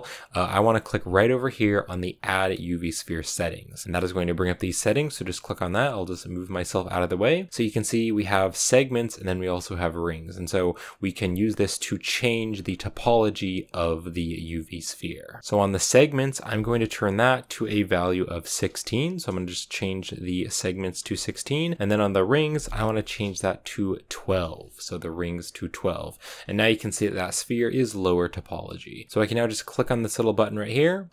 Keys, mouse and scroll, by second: 12.1 click, 13.7-15.1 drag, 24.5-26.3 drag, 26.3 scroll up 6, 27.4-31.1 scroll down 2.